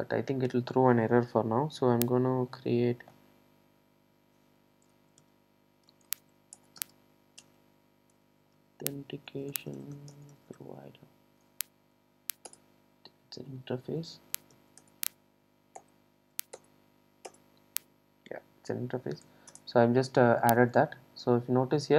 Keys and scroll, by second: 6.6 Return, 12.6 Return.